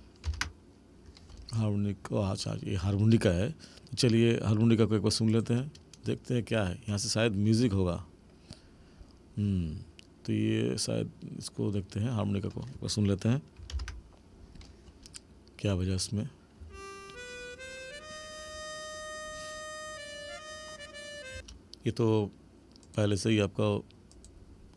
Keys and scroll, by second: 0.3 ctrl+=, 13.7 ctrl+=, 16.6 space, 21.3 space.